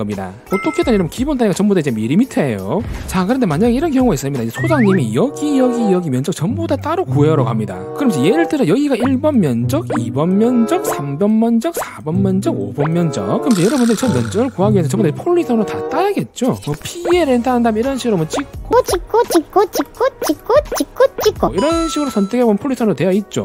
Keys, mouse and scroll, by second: 9.3 click, 10.0 click, 11.1 click, 11.9 click, 12.3 click, 12.8 click, 13.2 click, 17.6 right click, 18.3 click, 18.9 click, 19.4 click, 19.9 click, 20.5 click, 20.9 click, 21.4 click, 21.5 right click, 22.7 click.